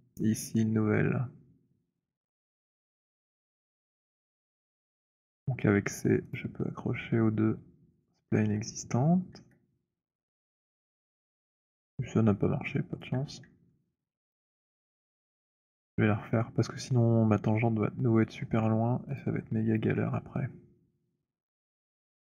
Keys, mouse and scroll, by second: 2.4 alt+middle click, 3.2 click, 5.5-9.2 typing, 6.5 click, 10.0 middle click, 10.2 middle click, 13.0 alt+click, 13.8 alt+middle click, 14.0 alt+middle click, 14.2 alt+click, 15.5 z, 19.2 click, 21.8-22.4 typing.